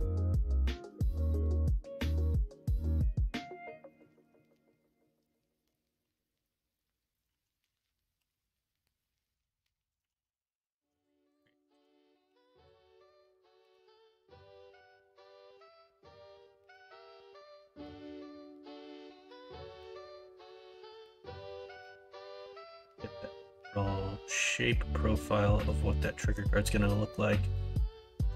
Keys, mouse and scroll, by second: 2.3 e, 4.1 ctrl+z, 6.0 e, 7.3 ctrl+z, 8.1 e, 10.0 ctrl+z, 11.2 click, 12.2 e, 15.8 alt+h, 20.3 middle click, 21.4 middle click, 22.0 middle click, 22.5 alt+z, 23.0-25.6 middle drag, 26.1 middle click, 26.8 middle click.